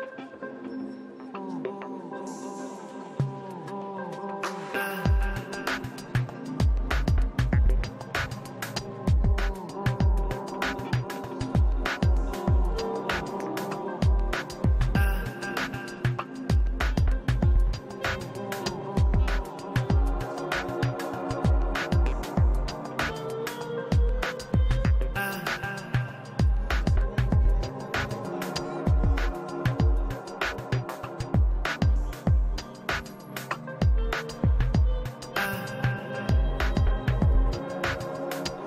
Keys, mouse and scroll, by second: 0.7-2.8 middle drag, 2.5-12.1 drag, 3.9 middle click, 5.1 middle click, 12.0-13.3 middle drag, 12.7 f, 13.0 f, 13.3-19.4 drag, 16.0 f, 18.3 middle click, 19.2-20.4 middle drag, 19.8-21.3 drag, 20.5-22.0 middle drag, 22.0 click, 22.5-24.7 middle drag, 23.4-29.5 drag, 24.8 middle click, 25.8 middle click, 26.8-28.1 middle drag, 28.0 f, 28.6 middle click, 29.5-31.8 middle drag, 31.2 f, 31.8-34.3 drag, 33.8 middle click, 34.0 shift+c, 34.2 f, 34.3 middle click, 34.5 f, 34.7-38.6 drag, 34.9 middle click, 35.2 middle click.